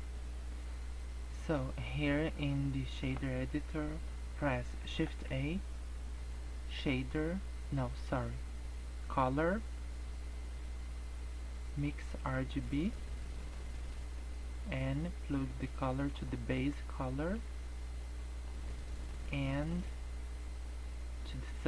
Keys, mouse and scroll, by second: 5.0 shift+a, 14.9 click, 17.4 click, 18.7-19.4 scroll up 6, 19.8 click.